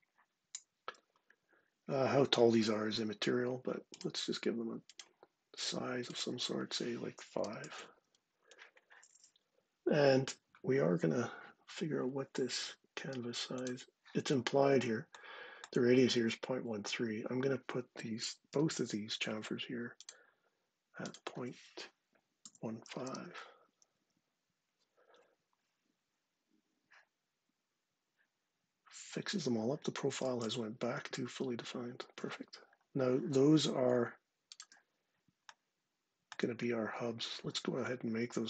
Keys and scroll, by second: 2.5 d, 7.2 typing, 18.3 d, 21.9-23.2 typing, 23.7 Return.